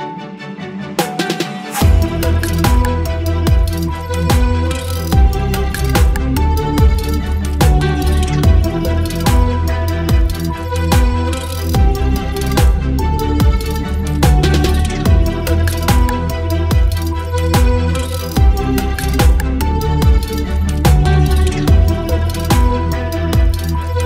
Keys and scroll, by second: 1.2 ctrl+BackSpace, 1.4 ctrl+d, 1.8 v, 2.8 Down, 5.4 Down, 6.0 space, 7.5 alt+space, 8.6 alt+space, 9.4 alt+space, 10.7 space, 11.1 space, 15.7 space, 16.6 Delete, 16.9 v, 17.0 Right, 17.4 space, 18.6 Down, 20.8 space, 22.2 space, 23.1 space.